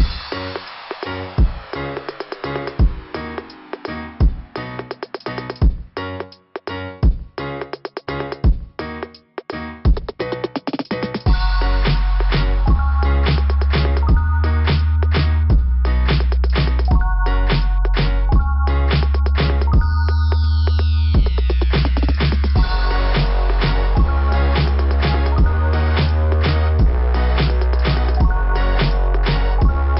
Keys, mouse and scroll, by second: 1.2 scroll down 2, 5.5-6.4 scroll down 4, 8.0 click, 8.1 click, 16.8 click, 19.0 click, 25.3 click, 26.3 click.